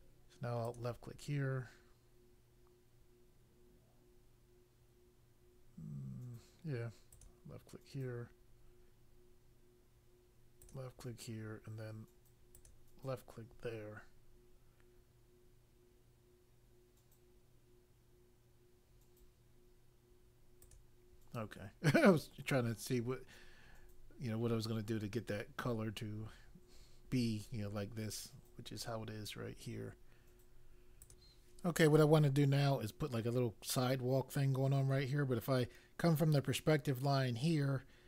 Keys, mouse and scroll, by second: 0.6 click, 7.1 click, 10.6 click, 12.5 click, 20.6 click, 31.0 click.